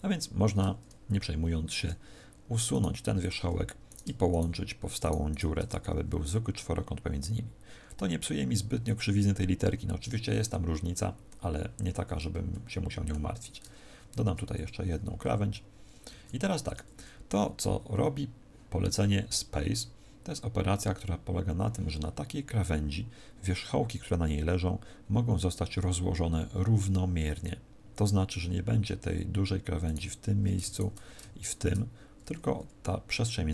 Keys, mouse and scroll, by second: 2.6 right click, 2.9 x, 3.7 right click, 4.2 shift+right click, 4.9 right click, 5.6 f, 5.9 a, 7.4-7.9 scroll down 3, 11.9-12.4 scroll down 1, 12.4 shift+middle click, 14.0 ctrl+r, 16.0 a, 29.7 right click, 30.6 shift+right click, 31.3 shift+right click.